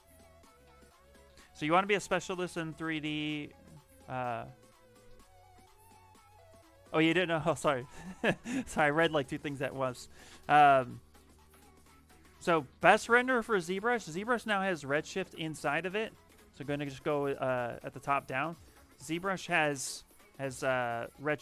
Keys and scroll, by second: 16.3 shift+f, 20.1 shift+f.